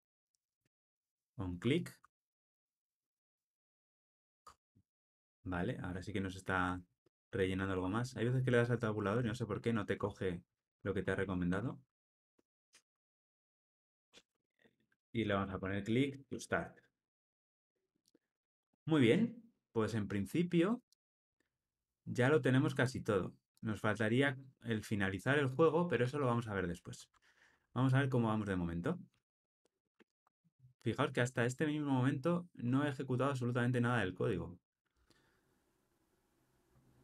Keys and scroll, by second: 0.7 Return, 9.9 Tab, 12.6 ctrl+alt+o, 17.1 alt+super+l, 17.4 ctrl+alt+o, 29.1 ctrl+r.